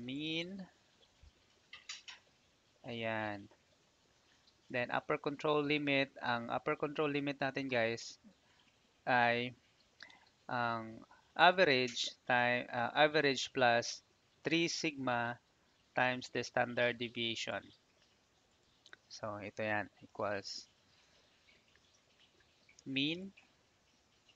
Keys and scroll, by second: 20.0 =.